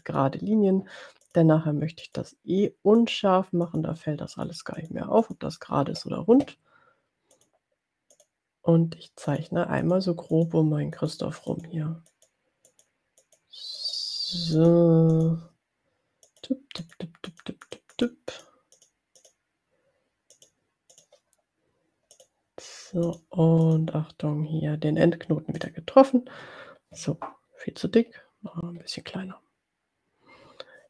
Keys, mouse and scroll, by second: 0.1 click, 1.4 click, 2.2 click, 3.1 click, 4.0 click, 4.4 click, 5.3 click, 7.4 click, 8.3 click, 9.3 click, 10.2 click, 10.4 click, 11.2 click, 11.6 click, 12.8 click, 14.3 click, 14.6 click, 15.4 click, 16.3 click, 16.9 click, 17.8 click, 18.9 click, 20.5 click, 21.0 click, 22.5 click, 23.5 click, 23.7 click, 25.7 click, 27.9-28.4 scroll down 2, 28.8-29.1 scroll down 2.